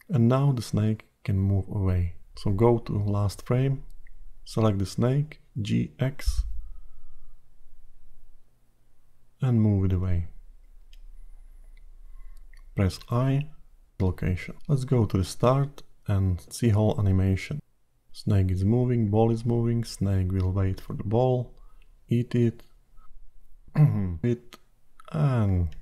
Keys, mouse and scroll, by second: 2.3 click, 6.5 g, 13.4 i, 15.6 click, 16.1 space.